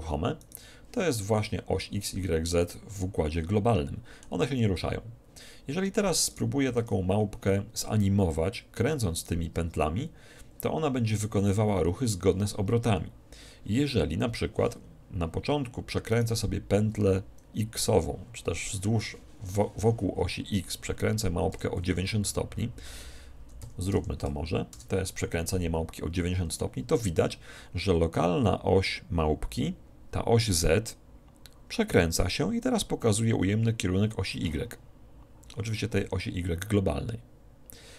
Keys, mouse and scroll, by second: 2.7-4.4 middle drag, 6.4-8.3 right drag, 6.9 alt+r, 9.3-11.0 right drag, 16.2-17.9 right drag, 21.6 r.